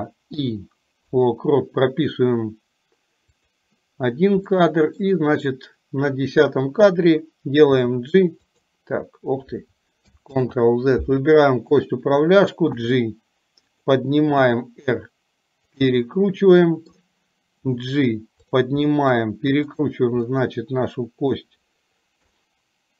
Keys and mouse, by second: 0.4 i, 3.4 click, 4.6 middle click, 7.8 g, 10.3 ctrl+z, 11.8 click, 12.8 g, 14.4 r, 16.1-17.1 middle drag, 17.7 g, 18.9 middle click, 20.3-21.4 middle drag, 22.4-22.9 middle drag.